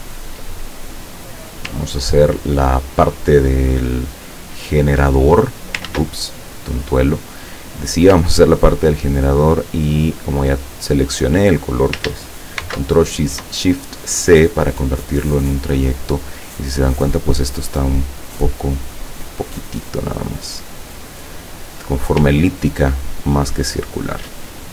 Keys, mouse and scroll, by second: 0.6-1.7 ctrl+middle drag, 4.9 click, 5.9 ctrl+z, 6.8 click, 8.3-11.1 ctrl+drag, 12.6 ctrl+shift+c, 13.8 click, 16.4 click, 17.6-20.0 drag, 20.4 click, 21.9 click, 22.7-24.7 ctrl+drag.